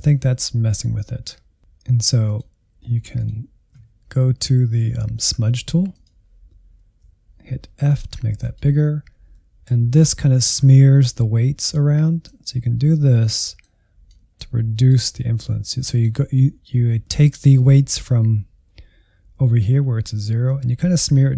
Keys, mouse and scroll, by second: 1.4-3.5 drag, 5.8-7.5 drag, 7.5 f, 9.3-10.4 middle drag, 10.4-15.0 drag, 15.0-20.4 middle drag, 20.4-21.3 drag.